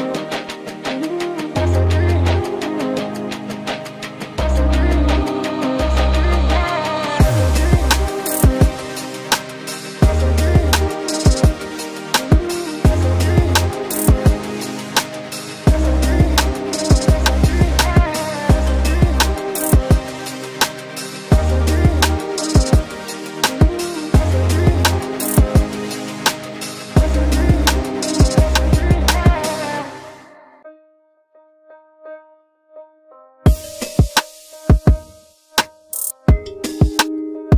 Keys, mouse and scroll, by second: 21.9 ctrl+click, 27.7 ctrl+g.